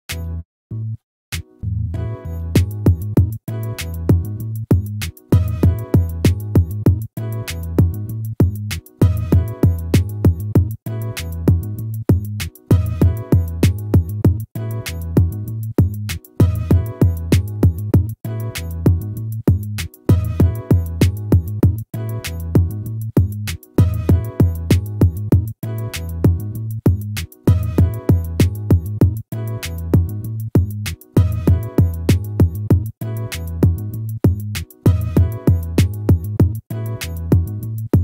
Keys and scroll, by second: 1.4 ctrl++, 6.8 ctrl+-, 11.6 ctrl++, 18.3 ctrl+-, 21.5 ctrl+z, 23.6 ctrl++, 26.6 ctrl+-.